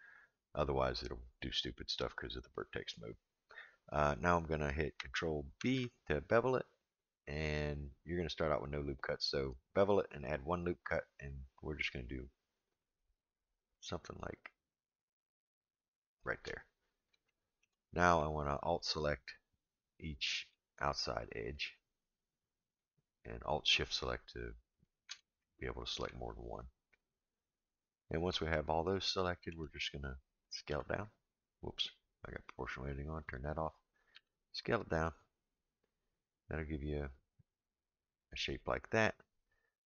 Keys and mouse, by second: 5.6 ctrl+b, 17.3 shift+middle click, 18.6 alt+click, 20.4 alt+shift+click, 22.6 alt+shift+click, 23.8 alt+shift+click, 25.4-27.1 shift+middle drag, 27.0 alt+shift+click, 27.9 alt+shift+click, 29.0 shift+middle click, 30.7 s, 33.2 click, 34.1 s.